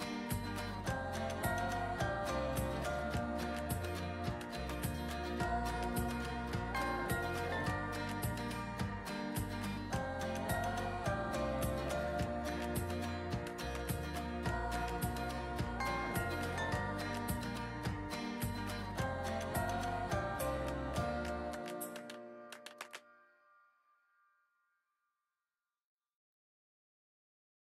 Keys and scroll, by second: 7.4 ctrl+z.